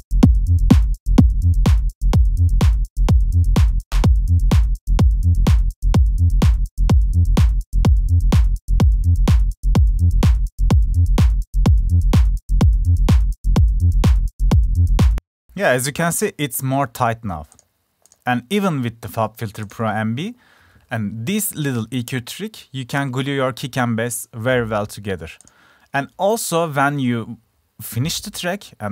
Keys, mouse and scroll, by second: 7.0 click, 9.4 click, 9.7 click, 17.1 click, 17.7-18.2 drag.